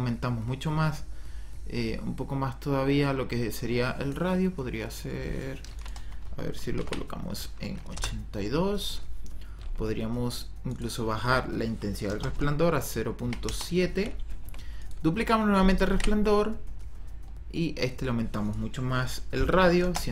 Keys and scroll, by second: 6.6 KP_8, 6.9 KP_2, 7.9 Return, 12.0 KP_0, 12.3 ,, 13.1 KP_7, 13.4 Return, 15.8 ctrl+d, 19.3 KP_1, 19.6 KP_6, 19.7 KP_0, 20.0 Return.